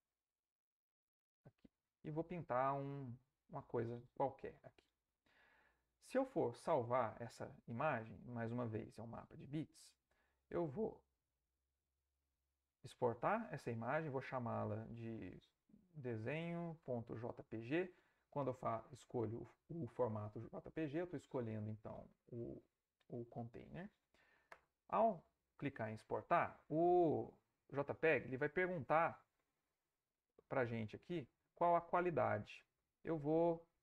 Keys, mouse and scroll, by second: 1.1 click, 2.4-3.4 drag, 12.3 ctrl+shift+e, 14.2-15.4 drag, 15.7-18.0 typing, 24.5 Return, 28.2 click, 30.4-32.3 drag.